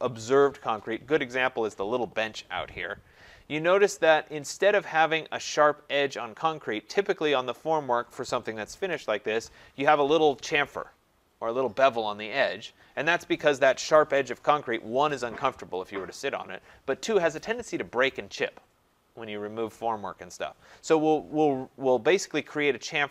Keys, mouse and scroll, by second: 4.7 scroll, 5.4 scroll.